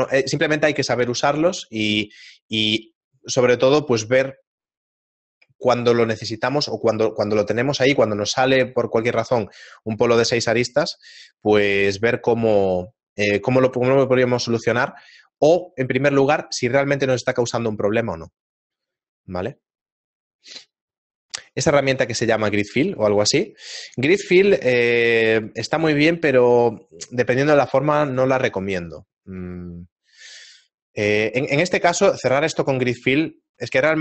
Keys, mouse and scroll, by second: 33.4 shift+middle click.